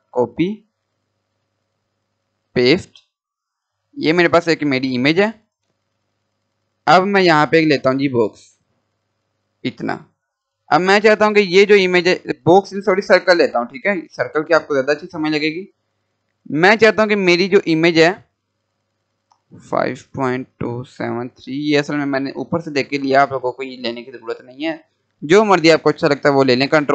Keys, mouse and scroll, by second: 0.0 click, 1.3 right click, 2.3 click, 3.6 scroll down 1, 4.0 click, 5.9 Delete, 7.2-12.4 drag, 13.5 Delete, 14.7-17.0 drag, 17.0 scroll up 1, 18.1-21.1 drag, 25.2 scroll up 1, 26.3 click.